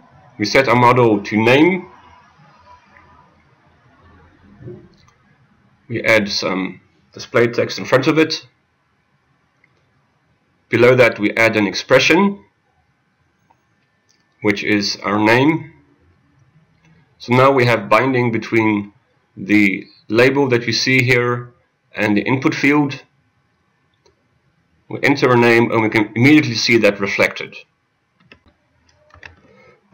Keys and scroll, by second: 7.6 ctrl+a, 9.2 ctrl+a, 9.8 Return, 29.5 alt+Insert.